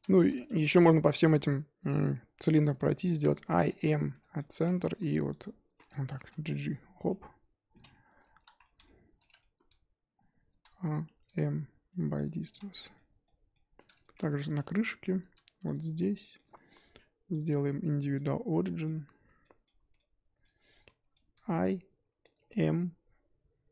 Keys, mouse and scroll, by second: 0.0 shift+middle drag, 0.5-0.9 middle drag, 0.9-1.3 scroll up 1, 1.3-2.7 middle drag, 2.7 i, 4.5 m, 4.6 1, 5.4 click, 5.7 z, 6.1 g, 7.0-8.5 middle drag, 8.5 z, 8.6-10.1 middle drag, 10.1-10.5 scroll down 2, 10.5 a, 12.2 m, 12.5 z, 12.9-14.3 shift+middle drag, 14.3 3, 14.4 click, 14.6 middle click, 14.8-15.7 scroll up 2, 15.7 shift+click, 16.1-18.2 shift+middle drag, 18.2 click, 18.7 scroll down 1, 18.7 middle click, 19.2 z, 19.4 middle click, 19.8 z, 19.9-21.3 middle drag, 21.3 i.